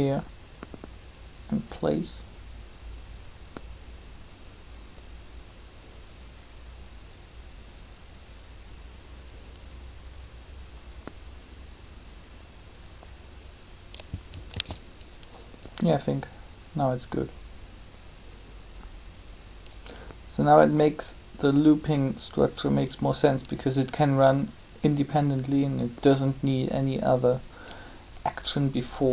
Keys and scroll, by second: 14.5 alt+a, 29.0-29.1 typing.